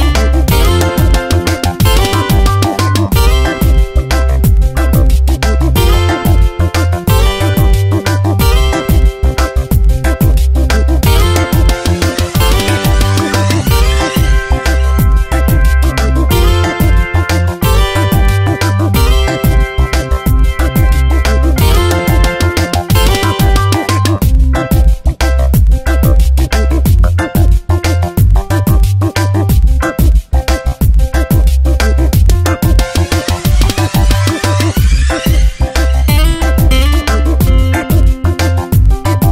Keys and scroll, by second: 2.1 space, 4.0 alt+BackSpace, 6.3 ctrl+BackSpace, 7.5 space, 12.7 ctrl+z, 24.0 space, 24.6 v, 31.0 alt+BackSpace, 34.1 v, 35.2 b, 38.4 x.